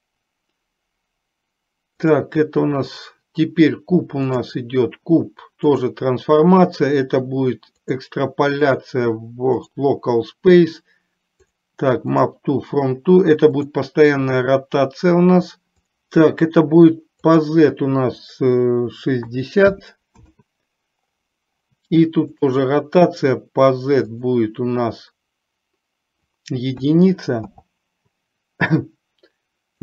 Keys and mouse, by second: 2.1 click, 4.3-6.1 drag, 7.8 click, 8.8-9.8 drag, 11.6 click, 13.7 click, 17.5-20.3 drag, 22.5 drag, 24.2-27.6 drag.